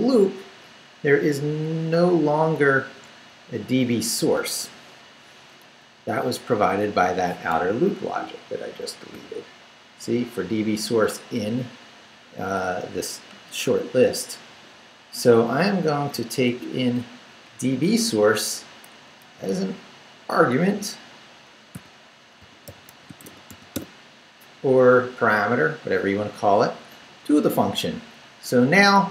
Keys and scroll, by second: 1.4 Down, 2.1 Right, 5.8 Up, 7.6 Escape, 8.1 u, 15.2 ctrl+r, 17.4 ctrl+Up, 18.0 Up, 19.2 Down, 19.5 Right, 21.7-23.7 typing, 26.8 Down, 28.2 Up, 28.9 Down.